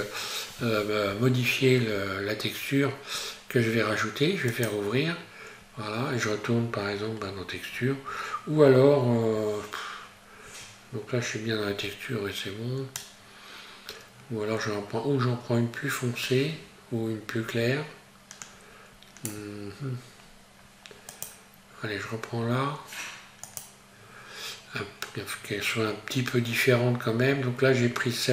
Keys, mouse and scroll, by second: 1.4-1.9 scroll up 1, 4.5 click.